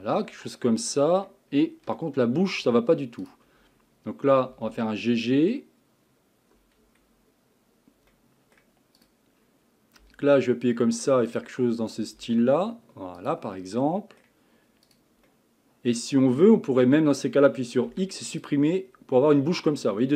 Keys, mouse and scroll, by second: 0.2 scroll down 1, 0.5 middle click, 1.5 scroll up 4, 2.0-3.2 shift+middle drag, 3.2 click, 4.5 g, 8.1 middle click, 9.0 click, 10.0 g, 11.9 click, 12.2 g, 13.6-14.9 middle drag, 14.9 click, 15.3-17.9 middle drag, 17.9 x, 18.9 scroll down 1, 19.2-20.1 middle drag.